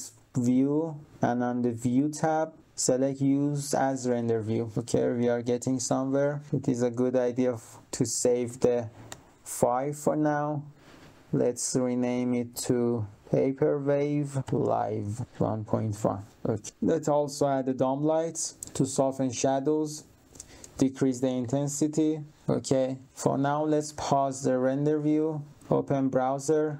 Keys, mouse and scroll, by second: 4.0 click, 4.7 click, 11.5 click, 12.6 click, 13.7 click, 14.3-15.7 typing, 15.8 click, 16.6 click, 19.3 click, 20.3 click, 20.8-21.9 typing, 22.3 click, 23.0 click, 24.9 click, 25.5 click, 26.6 click.